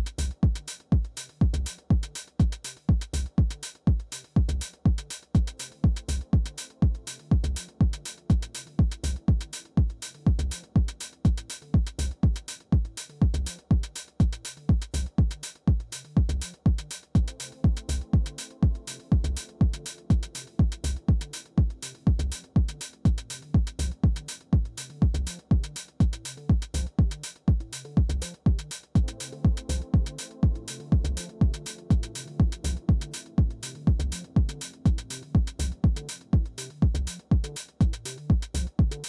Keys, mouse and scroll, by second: 1.0 typing, 2.4 Down, 2.6 Down, 3.2 Return, 4.8 Down, 5.1 Down, 5.3 Down, 6.4 Return, 9.0-10.3 typing, 10.4 Return, 12.4-16.9 typing, 16.7 Return, 24.0-27.7 typing, 28.1 Return, 31.6 Return, 33.2 Return.